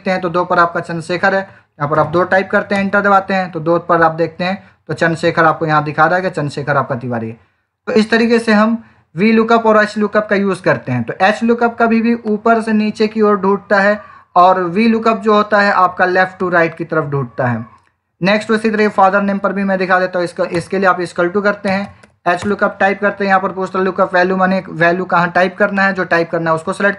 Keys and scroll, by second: 1.8 2, 2.6 Return, 20.4 =, 21.6 h.